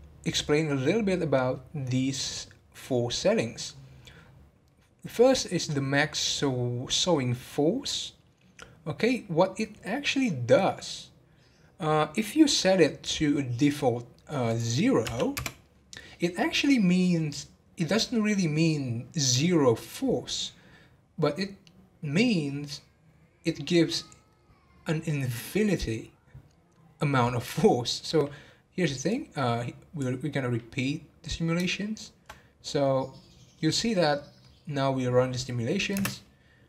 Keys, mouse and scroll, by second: 3.0-3.8 scroll down 10, 5.9 scroll down 11, 14.5-17.6 drag, 29.1-31.3 drag, 31.3-31.8 scroll down 1, 31.8-35.9 shift+middle drag, 35.9 space.